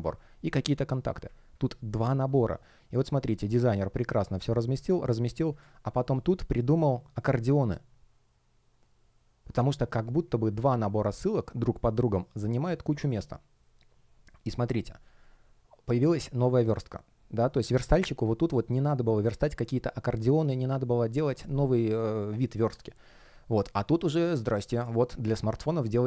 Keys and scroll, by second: 0.0 space, 5.9 space.